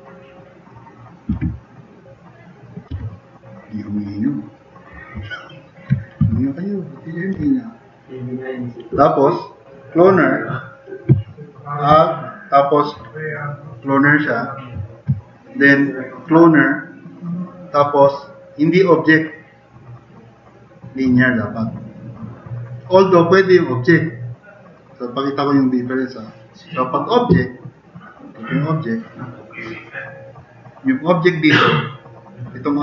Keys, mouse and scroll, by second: 0.5 click, 1.3 e, 2.0 click, 3.0-4.5 drag, 6.2 t, 6.4-7.0 drag.